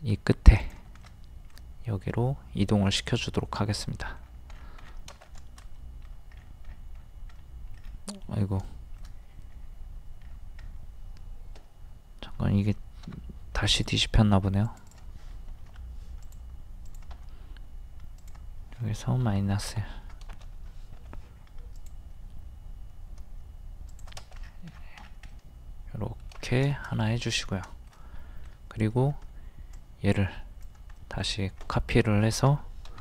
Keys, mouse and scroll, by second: 1.0-4.2 middle drag, 4.2-4.5 scroll down 1, 5.2 scroll down 1, 5.3 middle click, 6.4-6.7 scroll up 1, 7.4 middle click, 7.8 scroll down 1, 8.2 middle click, 8.3 scroll down 1, 9.0 shift+middle click, 9.5-10.1 scroll up 1, 10.3-10.6 scroll down 1, 13.1 m, 13.7 click, 15.6 ctrl+z, 16.2 click, 17.1 typing, 19.4 KP_1, 21.0 m, 21.8 click, 23.9 shift+click, 24.4 scroll down 1, 25.3 middle click, 26.4 scroll down 1, 26.7 shift+middle click, 27.4 scroll down 1, 27.8 shift+middle click, 29.7 click, 31.0 middle click, 32.9 m.